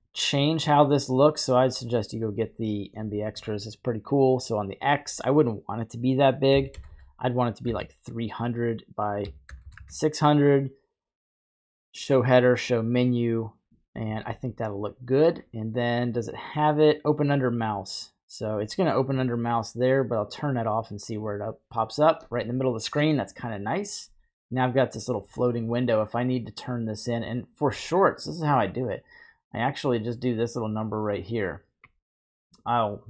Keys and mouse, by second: 0.7 middle drag, 1.8 middle drag, 4.9 click, 6.9 KP_0, 8.7 click, 9.6 KP_0, 12.0 click, 20.2-21.5 drag, 26.7-28.3 drag, 29.7-31.8 drag, 32.6-33.0 drag.